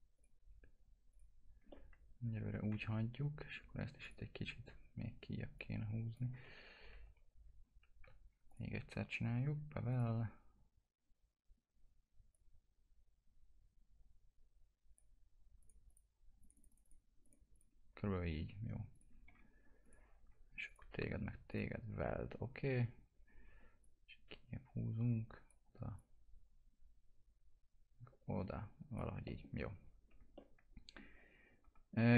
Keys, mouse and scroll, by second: 0.2 click, 1.7-4.0 alt+middle drag, 4.0 click, 6.4 ctrl+z, 8.5 click, 12.3-15.6 drag, 19.3 1, 19.8 click, 23.8-29.2 drag, 29.2 middle click, 29.5 scroll down 1, 30.4-32.1 alt+middle drag.